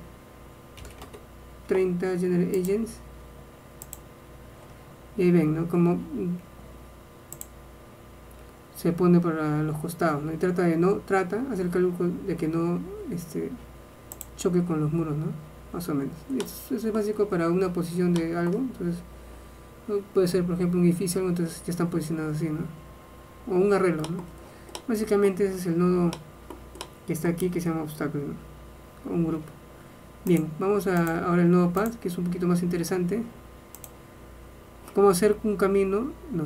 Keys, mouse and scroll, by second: 14.5-16.5 drag, 16.5 middle click, 18.5-20.7 middle drag, 24.1 middle click, 31.1-32.2 drag.